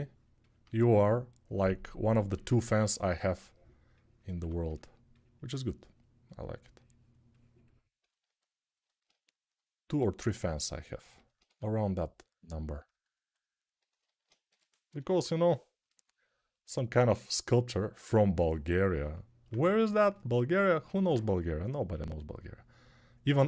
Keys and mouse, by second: 2.1 2, 4.1 1, 11.2 q, 14.2 g, 14.6 ], 14.8 ], 22.7-23.4 ctrl+right drag.